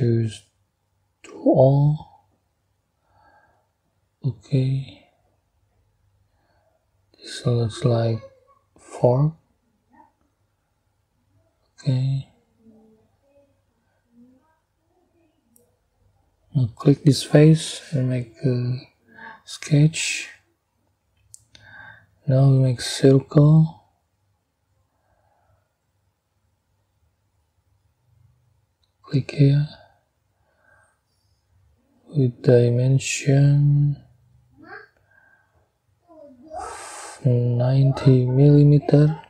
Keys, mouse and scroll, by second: 1.3 click, 2.7-4.3 middle drag, 5.7-7.5 middle drag, 7.8-9.0 middle drag, 9.0 double click, 10.9 click, 11.9 click, 13.1 click, 14.6 click, 17.0 click, 19.0 click, 20.3 scroll down 1, 21.0 scroll up 1, 24.4 click, 25.0-25.4 scroll up 3, 28.7 click, 29.4-29.9 scroll down 3, 32.5 click, 33.3 right click, 34.5 click, 36.1 click, 38.4 9, 38.5 0.